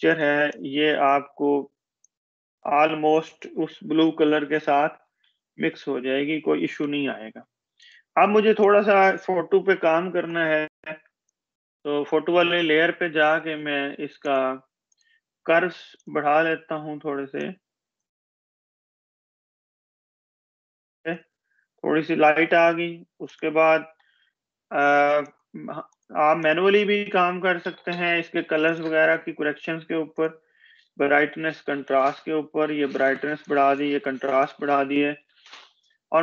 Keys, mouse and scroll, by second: 0.1 click, 0.4-0.7 space, 1.6 click, 2.0-2.4 space, 3.7 ctrl+-, 7.5 click, 11.0-11.5 space, 16.6-18.9 drag, 20.2 space.